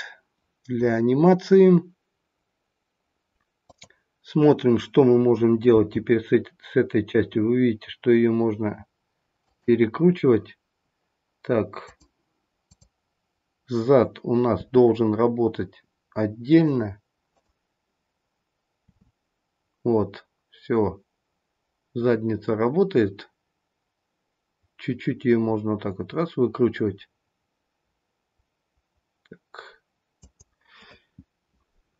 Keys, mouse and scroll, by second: 3.5 click, 5.7 g, 11.8 click, 13.9 click, 14.4 r, 17.3 click, 18.8 r.